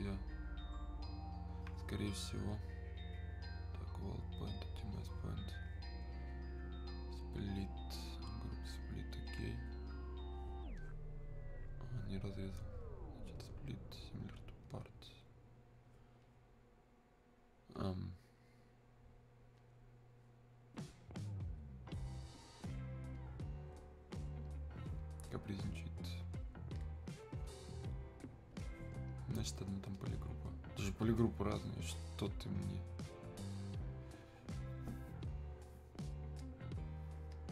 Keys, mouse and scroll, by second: 19.7 click, 26.8 click, 35.3 click.